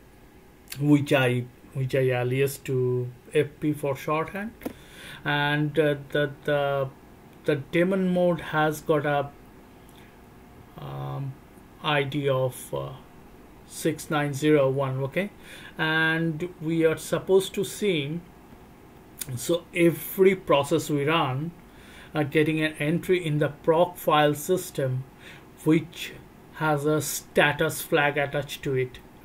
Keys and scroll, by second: 4.4 Return.